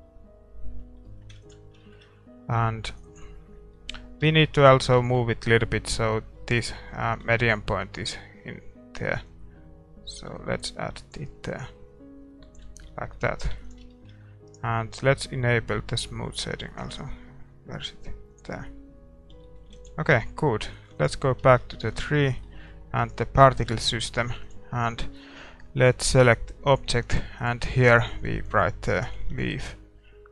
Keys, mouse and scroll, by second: 1.0-7.2 middle drag, 1.8 ctrl+s, 3.0-4.9 drag, 7.2 Tab, 7.6-8.1 scroll down 1, 8.1-9.2 scroll down 1, 9.2-11.1 drag, 9.2-9.6 scroll down 1, 11.6-13.9 drag, 12.6 Tab, 13.0-16.1 middle drag, 13.9 ctrl+s, 14.5-17.4 right drag, 16.1-23.1 drag, 18.4 middle click, 19.3 a, 19.4-21.2 middle drag, 21.0 ctrl+s, 21.6-23.8 middle drag, 22.2 ctrl+s, 23.1-26.7 right drag, 26.7 ctrl+s, 26.7-30.3 drag.